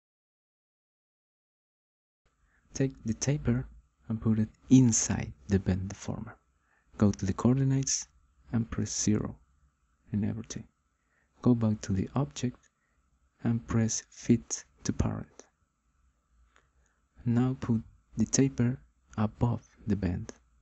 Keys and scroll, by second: 8.4 0, 9.0 Return.